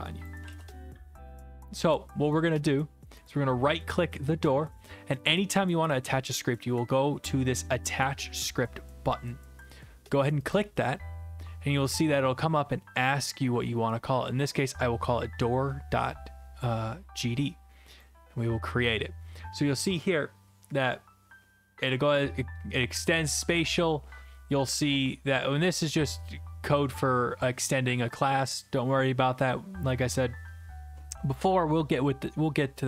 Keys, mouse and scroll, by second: 0.2 click, 1.3 ctrl+z, 3.3-5.3 right drag, 10.5-11.5 drag, 18.0-19.0 drag, 26.3 click.